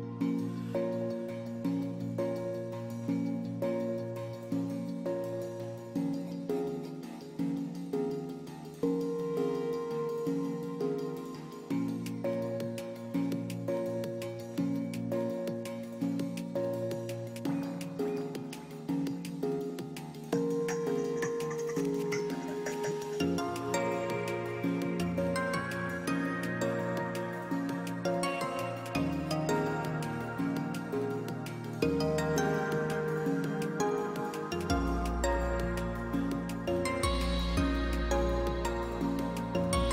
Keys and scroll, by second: 1.4 ctrl+space, 1.7 ctrl+space.